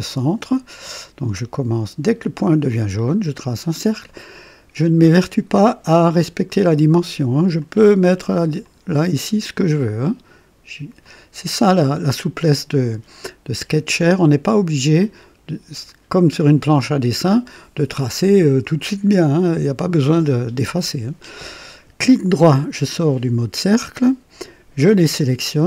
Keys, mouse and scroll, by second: 2.7 click, 3.6 click, 7.6 click, 8.6 click, 11.0 click, 12.3 click, 17.3 click, 19.3 click, 22.4 right click, 24.8 click.